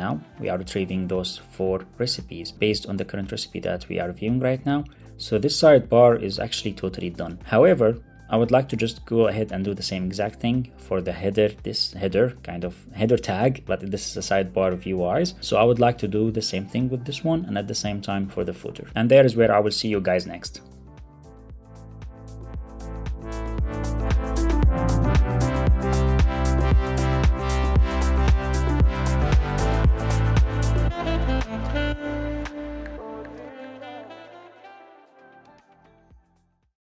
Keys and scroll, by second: 0.3 super+r.